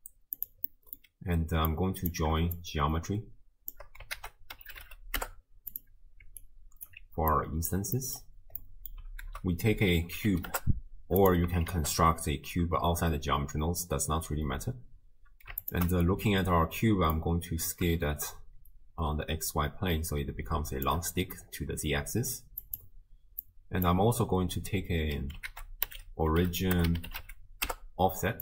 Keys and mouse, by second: 0.7 click, 1.7 click, 2.6-3.8 shift+drag, 4.2 ctrl+a, 6.4-6.9 alt+drag, 7.3 click, 8.0 click, 8.0 middle click, 8.0 right click, 8.6 click, 8.6 middle click, 8.6 right click, 9.3 ctrl+a, 11.7 shift+a, 15.6 ctrl+shift+click, 17.1-20.9 drag, 22.6 click, 23.4 click, 25.5 ctrl+a.